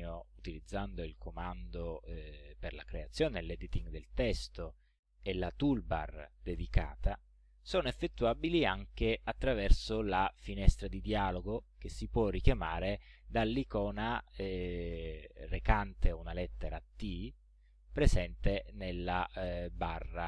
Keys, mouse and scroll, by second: 1.2 click, 3.4 click, 4.1 click.